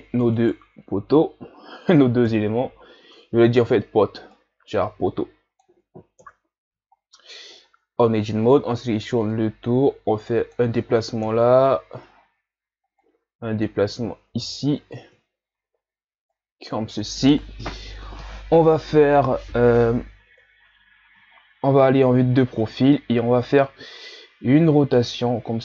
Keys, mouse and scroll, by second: 0.4 shift+right click, 2.3 KP_3, 3.6 shift+scroll up 3, 4.3-6.2 drag, 6.2 KP_1, 6.9 shift+scroll up 5, 7.6 Tab, 8.2 ctrl+scroll up 1, 8.5 a, 8.8 a, 9.3-11.2 drag, 11.2 KP_3, 12.2-13.0 scroll down 5, 13.0-14.4 drag, 14.4 KP_1, 16.3-19.3 drag, 20.3 KP_3, 21.4 ctrl+scroll down 1, 21.6 scroll up 3, 22.4 shift+scroll down 3, 23.8 scroll down 1, 24.5 r.